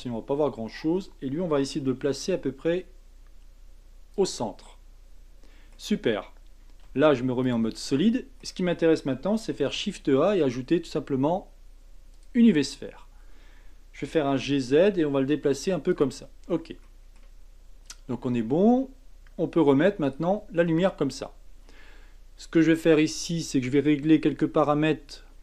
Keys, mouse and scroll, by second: 1.8 g, 4.6-6.8 middle drag, 6.8 z, 7.8-9.6 middle drag, 9.6 shift+a, 12.6 scroll up 5, 14.0 g, 16.4-16.8 scroll down 4, 16.8-17.8 middle drag, 17.8 click, 20.1 click, 20.7 middle click, 21.1 scroll up 2, 21.7 scroll down 2, 23.6-25.4 drag.